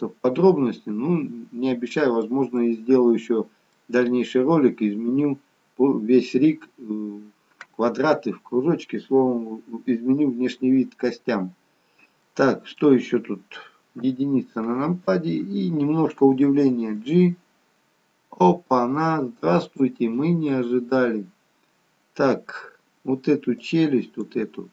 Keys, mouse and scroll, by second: 2.6 middle click, 2.6 scroll up 1, 4.1-4.8 scroll down 1, 7.0-7.4 scroll down 5, 7.6-8.7 scroll down 1, 11.4-11.9 scroll up 2, 12.3 middle click, 12.3-14.2 scroll up 2, 14.2 KP_1, 17.1 g, 23.8 click.